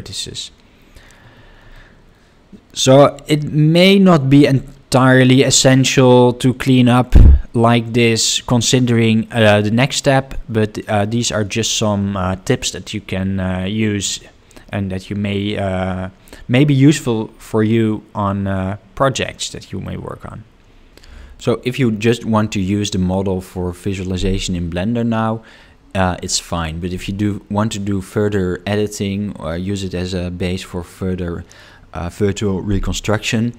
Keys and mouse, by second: 1.7-3.0 middle drag, 7.8-9.3 middle drag, 11.2 middle click, 15.4-16.8 ctrl+middle drag, 19.3 middle click.